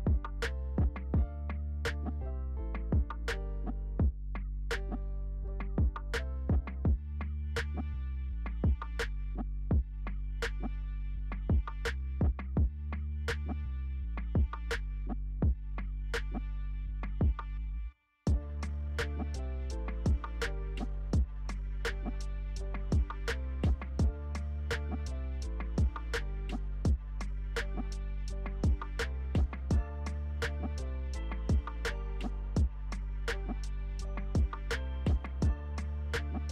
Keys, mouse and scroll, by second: 8.3-16.6 alt+drag, 16.6-20.7 alt+drag, 24.8 alt+click, 34.5 alt+click, 34.9 alt+click.